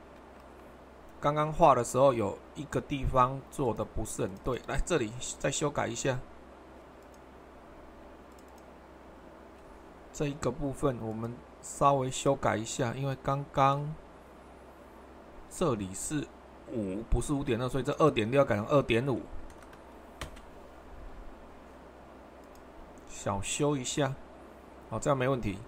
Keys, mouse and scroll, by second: 0.0 super+2, 5.6 middle click, 5.7-6.8 drag, 11.1-15.5 drag, 15.7-16.7 drag, 17.8-20.2 drag, 20.2 Return, 20.2 typing, 22.4-23.5 drag, 24.7 click.